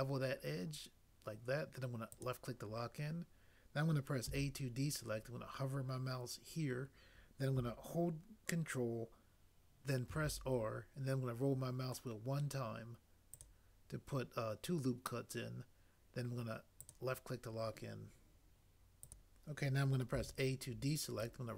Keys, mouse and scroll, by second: 4.3 a, 10.1 ctrl+r, 20.1 a, 21.2 a.